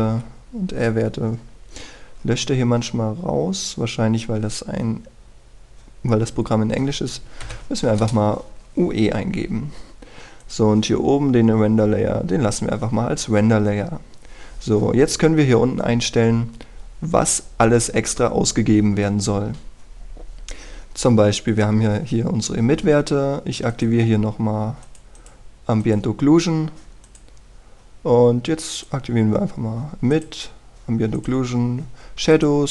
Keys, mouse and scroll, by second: 1.1 Left, 8.4 u, 11.3 click, 15.7-19.6 scroll down 1, 24.7 click.